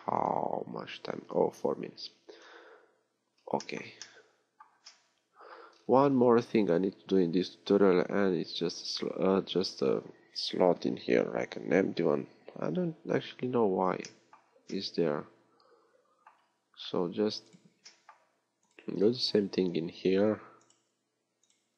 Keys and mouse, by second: 5.1-6.4 middle drag.